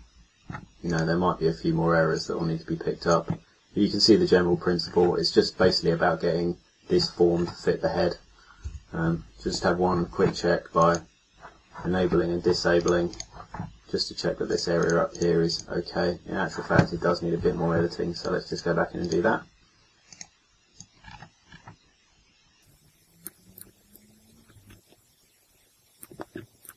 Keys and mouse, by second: 8.6 KP_3, 26.6 click.